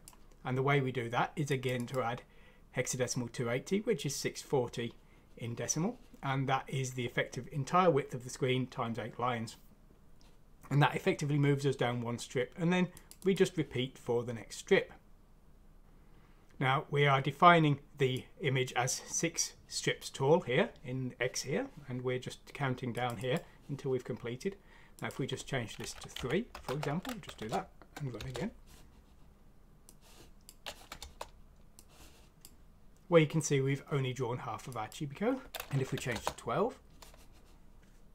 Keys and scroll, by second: 26.1 Left, 26.6 shift+3, 27.2 F6, 28.1 Return, 30.9 Return, 35.2-36.0 typing, 36.1 Return.